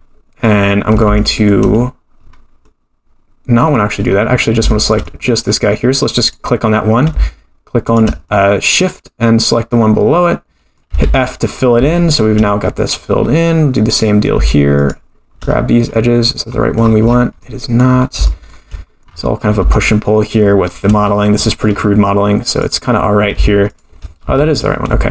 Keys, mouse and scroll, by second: 0.8 scroll up 3, 1.1 shift+middle click, 1.8-2.6 scroll up 2, 2.6-3.7 middle drag, 2.6 scroll down 1, 4.2-4.7 scroll up 2, 4.7 shift+middle click, 5.0 middle click, 6.2 click, 7.8 shift+click, 8.2-10.8 middle drag, 10.9 f, 11.3-11.8 scroll down 2, 11.9 shift+middle click, 12.6-13.8 scroll up 14, 13.9 click, 14.8 shift+click, 15.5-16.1 scroll up 3, 16.2-17.2 scroll down 24, 17.4 middle click, 17.8 scroll down 2, 18.2 shift+middle click, 19.1-19.7 scroll up 9, 19.7 shift+middle click, 21.1-22.3 scroll up 7, 22.6 click, 23.7 shift+click, 24.2 f, 24.7-25.1 scroll down 4.